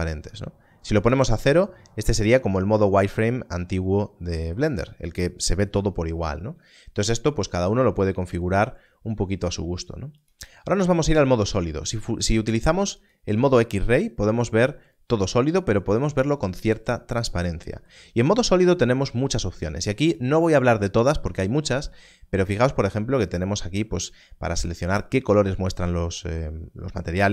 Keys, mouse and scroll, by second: 4.6 click, 10.2 click, 12.9 click, 20.0 click.